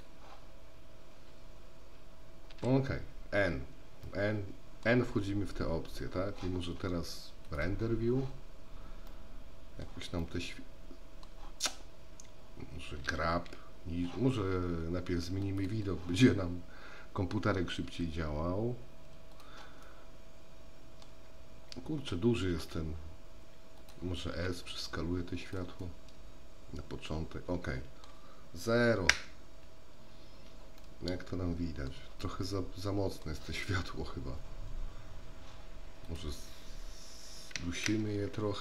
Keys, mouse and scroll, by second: 2.6 n, 4.2 middle click, 7.6 click, 9.4-10.1 middle drag, 10.5-11.6 middle drag, 15.6 click, 18.0 g, 20.1-21.2 middle drag, 22.6 r, 24.6 s, 26.0-28.3 middle drag, 29.3 KP_0, 30.9-32.1 middle drag, 32.6-33.5 middle drag, 36.1-38.6 drag, 37.9 KP_0.